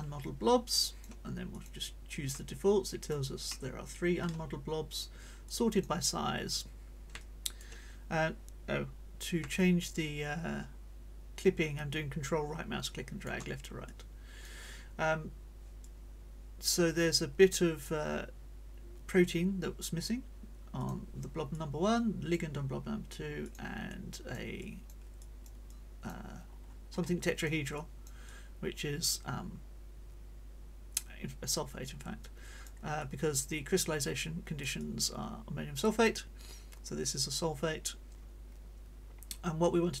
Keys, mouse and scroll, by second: 0.6 click, 1.5 click, 2.4 click, 3.4 middle click, 4.9 click, 5.4 click, 6.2 scroll up 1, 7.2 ctrl+click, 9.6-13.4 ctrl+drag, 13.8 click, 15.8-18.0 drag, 20.8 click, 21.5-22.5 drag, 23.4 click, 23.9 click, 24.6 click, 25.2-26.3 drag, 26.4 middle click, 26.4-26.8 scroll up 1, 26.9 middle click, 27.3 click, 27.8-32.8 drag, 33.0 right click, 34.2-40.0 right drag, 34.8-40.0 drag.